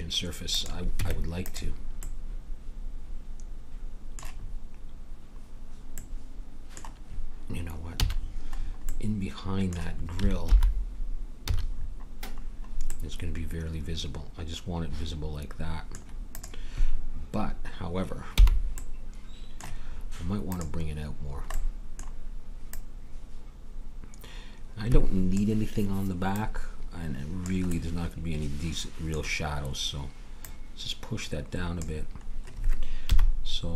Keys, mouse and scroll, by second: 1.0 Tab, 8.0 a, 10.4 alt+h, 11.4 a, 16.3-18.0 drag, 18.3 h, 20.5-25.3 drag, 26.3-28.3 drag, 27.7-30.4 middle drag, 30.4-32.2 drag, 33.1 KP_1.